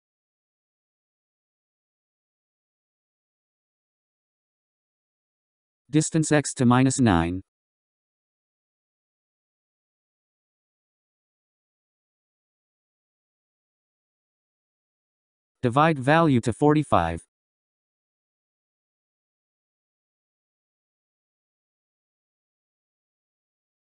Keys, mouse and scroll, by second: 2.7-5.1 scroll down 17, 5.1-8.1 scroll up 13, 8.1-9.2 scroll up 4, 9.2-11.4 drag, 15.6-17.6 middle drag, 17.6-19.5 drag, 20.1-23.3 middle drag.